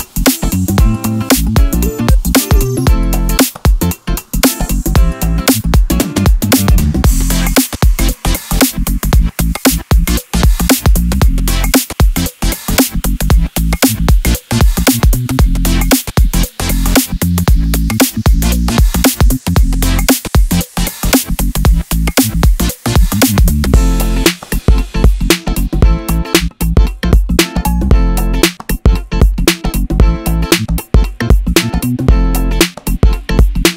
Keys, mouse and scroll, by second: 0.4 scroll up 1, 0.8 Tab, 0.8-2.1 middle drag, 2.1 click, 2.1 1, 2.5 ctrl+b, 7.3 click, 7.6 shift+click, 7.9 shift+click, 8.2 shift+click, 8.7 x, 9.6 middle click, 10.0 2, 10.2 click, 10.4 click, 11.1 shift+click, 11.3 f, 11.7 click, 12.4 shift+click, 12.5-17.0 typing, 12.8 click, 13.5 click, 13.6 shift+click, 14.4 click, 14.5 shift+click, 14.9 click, 15.3 click, 15.5 shift+click, 15.9 scroll down 2, 16.0 middle click, 16.7 click, 16.8-18.3 middle drag, 18.3 click, 18.4-20.4 middle drag, 19.8 Tab, 20.4 click, 20.7-22.3 middle drag, 21.4 scroll down 2, 21.5 scroll up 2, 21.9 Tab, 22.3 alt+click, 22.6 alt+click, 22.9 shift+click, 23.1 shift+click, 23.3 shift+click, 23.4 shift+click, 23.6 shift+click, 23.7 shift+click, 24.1 shift+click, 24.3-26.8 middle drag, 25.8 e, 26.9 middle click, 27.0 Tab, 27.1 click, 27.3 Tab, 27.8 ctrl+4, 28.2 ctrl+e, 28.5 Escape, 28.8 ctrl+r, 30.9 click, 31.5 3, 31.6 click, 32.0 alt+click, 32.5 shift+d, 32.6 Return, 33.2 shift+middle click, 33.4 scroll up 2, 33.6 Tab.